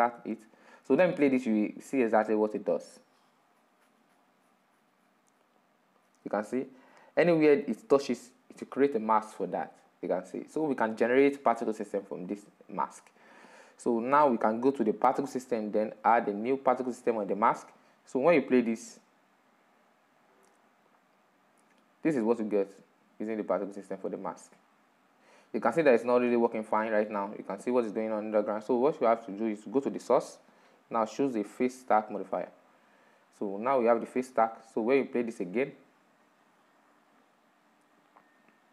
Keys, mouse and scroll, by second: 0.2-0.6 scroll down 4, 0.8-2.3 middle drag, 2.3-5.9 drag, 9.7 click, 10.2-13.8 middle drag, 13.8-21.7 drag, 27.0 drag, 27.3-31.7 middle drag, 31.7 click, 34.0-38.0 drag.